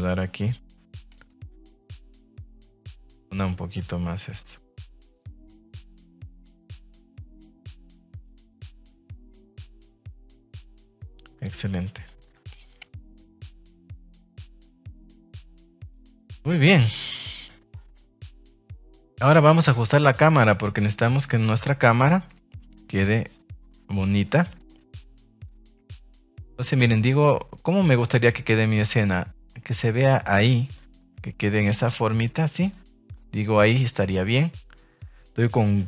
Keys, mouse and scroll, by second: 1.1 right click, 1.5 s, 2.2 click, 2.4 Tab, 2.8 middle click, 3.9 middle click, 4.9 click, 6.4 click, 7.3 middle click, 7.5 Tab, 8.3 alt+right click, 8.7 right click, 9.3 right click, 9.6 s, 10.6 click, 10.7 Tab, 11.1 middle click, 11.8 middle click, 12.2 shift+middle click, 12.4 middle click, 13.8 click, 14.9 shift+middle click, 15.1 middle drag, 15.9 shift+middle click, 16.8 click, 17.3-17.8 middle drag, 18.2 KP_0, 19.7-20.2 middle drag, 20.3 shift+middle drag, 20.7 middle click, 21.1 shift+middle click, 21.6-23.9 middle drag, 24.4 shift+middle click, 24.6 middle click, 26.8 shift+middle click, 28.0 shift+middle click, 28.6 middle click, 29.4 middle click, 30.2 shift+middle click, 30.9 middle click, 32.1 middle click, 33.1 shift+middle click, 33.7 middle click, 34.0 shift+middle click.